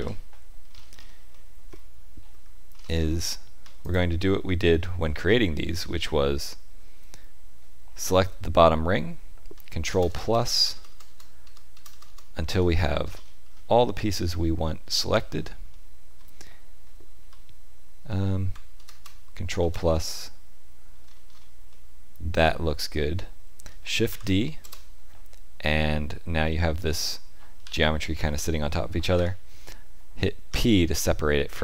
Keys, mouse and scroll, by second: 0.6-1.3 scroll up 5, 1.3 shift+middle click, 2.3 Tab, 2.7-3.5 scroll up 3, 3.8 alt+click, 5.2 shift+middle click, 9.8 ctrl+KP_Add, 10.0 ctrl+KP_Add, 10.8-12.5 ctrl+KP_Add, 13.1-13.7 scroll up 6, 13.7 shift+middle click, 14.2 middle click, 15.0 scroll up 2, 15.6 shift+middle click, 18.7 ctrl+KP_Add, 18.9 ctrl+KP_Add, 19.6 ctrl+KP_Add, 20.9-21.9 scroll down 7, 21.6 middle click, 24.1 shift+d, 27.6 g, 30.4 p.